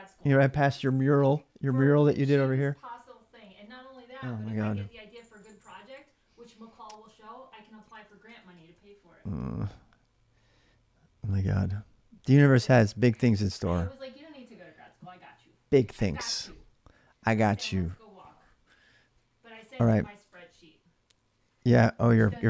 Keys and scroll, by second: 7.2-9.0 typing.